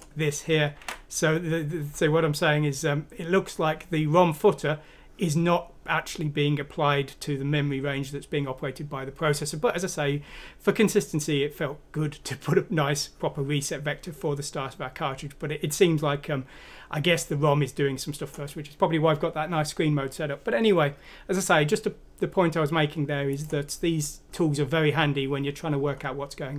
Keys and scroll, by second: 0.9 alt+Tab.